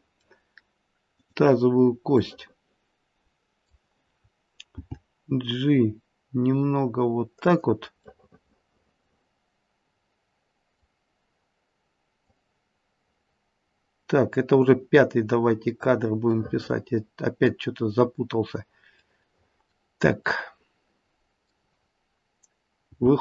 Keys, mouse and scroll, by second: 0.1 middle click, 1.1 click, 2.2-3.0 middle click, 2.7 middle click, 4.7 g, 8.1 middle click, 12.2 click, 16.4 middle click, 19.0 middle click, 20.3 middle click, 20.5 middle click, 22.8 g.